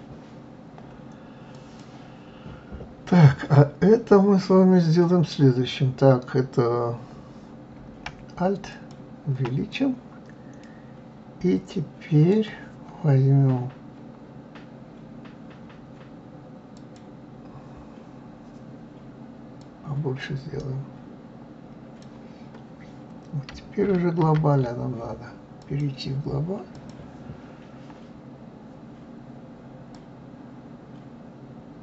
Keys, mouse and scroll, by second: 1.5 click, 8.7 alt+click, 9.7-12.7 middle drag, 16.8 click, 19.6-22.6 drag, 24.2 ctrl+z, 25.6-28.6 drag, 29.9-31.8 drag.